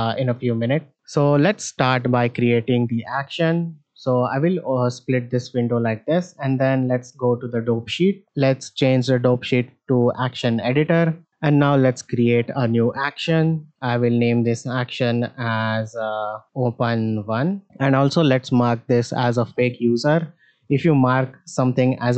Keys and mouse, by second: 2.3-3.4 drag, 5.2-7.8 drag, 8.6-11.1 drag, 11.5 shift+middle drag, 13.2 click, 13.8-17.6 drag, 19.4 click, 20.4 shift+middle drag.